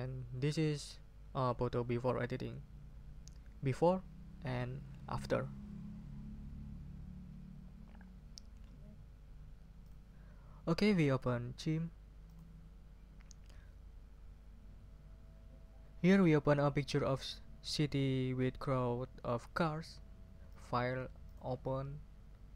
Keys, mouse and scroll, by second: 0.2 scroll up 2, 4.5 scroll down 2, 9.8 click, 12.3 click, 20.5 click, 21.2 click.